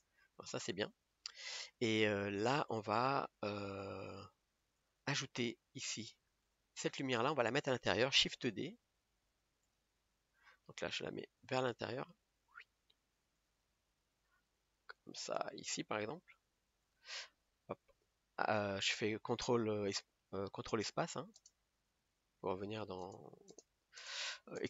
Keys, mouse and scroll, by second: 0.4-1.6 scroll up 8, 2.8 click, 3.4 scroll down 2, 4.4 click, 5.3 scroll down 3, 6.2 click, 8.9 shift+d, 10.0-11.2 middle drag, 11.2 scroll up 3, 11.3-12.6 middle drag, 12.6 g, 13.8 middle click, 14.3-14.7 scroll up 1, 14.7 g, 16.0 middle click, 16.5 g, 23.4 ctrl+space, 24.3 ctrl+space.